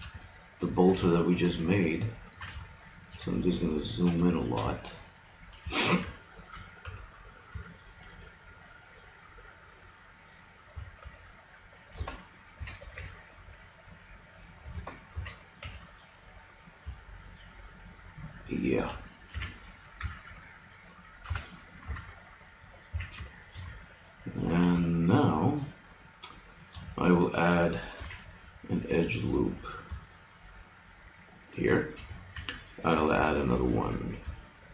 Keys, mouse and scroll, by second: 6.8 g, 12.6 g, 15.1 g, 19.4 a, 20.0 KP_Decimal, 21.2 a, 21.8 KP_Decimal, 23.0 a, 23.2-24.5 middle drag, 28.0 ctrl+r, 32.9 ctrl+r, 34.6 middle click.